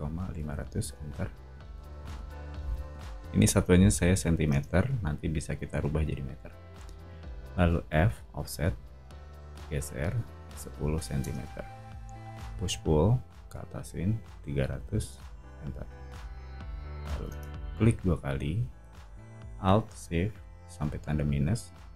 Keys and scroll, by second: 0.0-0.8 typing, 1.8 o, 4.5 space, 7.8 f, 10.4-11.2 typing, 11.2 Return, 12.4 p, 14.2-15.9 typing, 17.3 space.